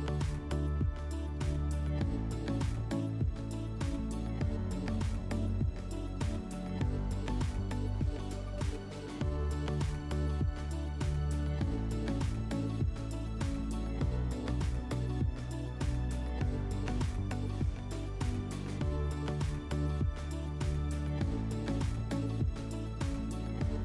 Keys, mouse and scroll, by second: 0.8 click, 1.2 click, 2.0 click, 2.9 click, 3.6 click, 3.9 click, 4.6 middle click, 6.0 shift+click, 6.8 click, 7.0 click, 7.4 click, 7.7 click, 8.8 click, 10.1 click, 10.7 click, 11.1 click, 12.0 click, 12.6 click, 13.8 click, 14.3 click, 15.4 click, 16.0 click, 17.2 click, 17.9 click, 18.4 click, 19.0 click, 19.6 click, 20.6 click, 21.9 middle click, 23.5 middle click, 23.5 click.